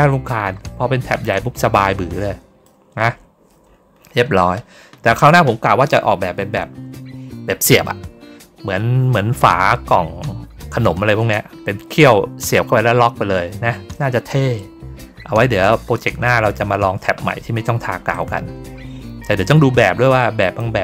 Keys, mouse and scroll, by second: 1.2-2.5 drag, 2.9-4.0 scroll down 4, 5.1-5.6 scroll up 2, 14.6 ctrl+middle click, 15.0 ctrl+middle click, 16.2 middle click, 18.0-20.5 drag.